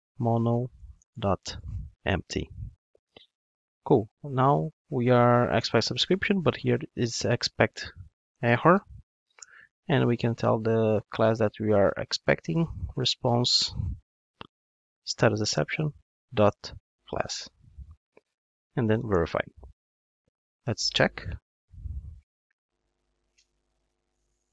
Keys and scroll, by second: 1.6 Return, 9.4 Return, 15.6 Return, 22.8 ctrl+shift+d.